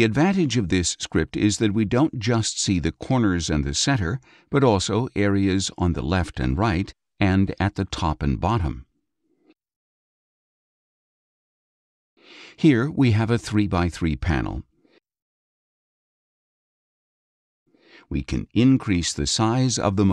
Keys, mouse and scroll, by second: 1.4 click, 3.7-4.0 scroll down 1, 4.6 space, 4.7 click, 5.7 scroll down 1, 5.9 click, 5.9 space, 6.8 click, 7.5 click, 8.1 click, 8.8 click, 9.3 click, 9.8 click, 10.9 click, 11.4 click, 12.2 click, 12.7 scroll up 2, 16.2 click, 19.3 click.